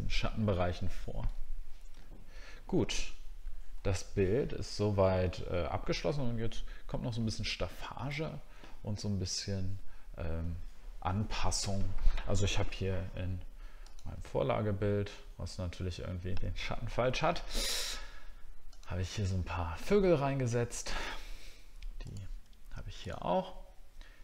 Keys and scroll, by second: 0.3 alt+scroll down 1, 1.4 alt+scroll down 1, 2.1 alt+scroll down 1.